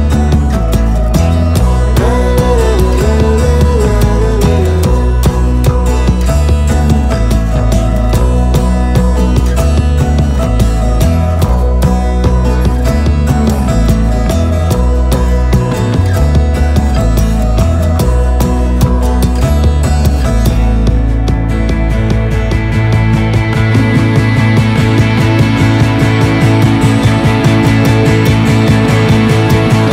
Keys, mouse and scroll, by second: 12.1 click, 25.9 click.